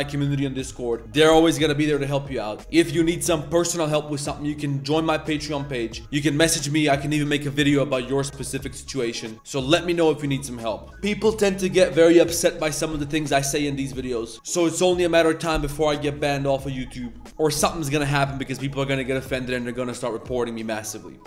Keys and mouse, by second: 14.3 middle drag.